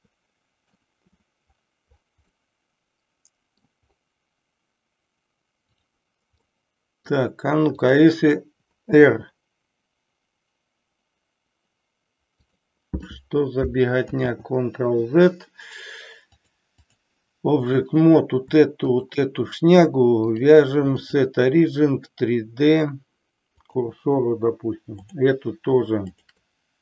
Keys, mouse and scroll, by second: 2.5-3.6 middle drag, 6.5-7.2 middle drag, 7.8 click, 8.9 r, 12.5 click, 14.1 ctrl+z, 16.2 click, 17.7 click, 18.8 shift+click, 20.2-23.9 drag, 25.1 click, 26.1 shift+click.